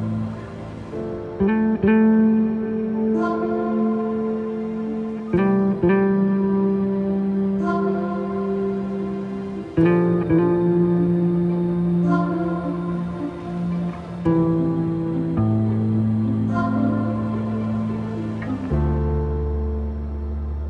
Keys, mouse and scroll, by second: 2.0 click, 4.8 click, 9.0 click, 11.2 click, 12.5 alt+scroll down 1, 14.3 alt+scroll up 1, 15.2 click, 18.3-20.6 drag.